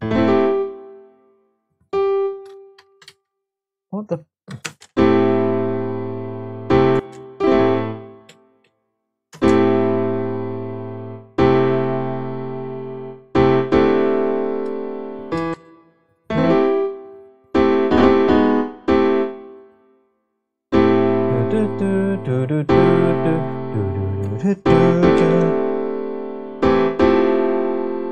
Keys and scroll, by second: 3.0 super+z, 4.6-5.7 space, 6.9 space, 7.9 Left, 9.3 space, 15.5 space, 21.0 space, 25.1 super+j.